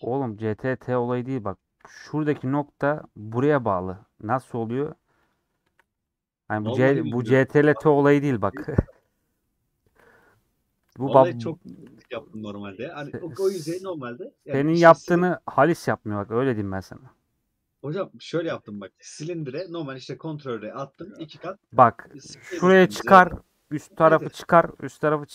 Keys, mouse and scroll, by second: 2.0 1, 2.1 click, 2.4-3.5 middle drag, 3.5 click, 3.6-5.1 middle drag, 5.1 3, 5.1-6.4 drag, 6.4 middle click, 6.6 scroll down 1, 7.3 KP_4, 9.8 alt+z, 15.2-16.3 middle drag, 16.3 e, 18.8-21.0 middle drag, 21.0 ctrl+z, 21.3-23.4 middle drag, 23.4-23.8 scroll down 2, 23.8-24.1 scroll up 2, 25.1 shift+middle click.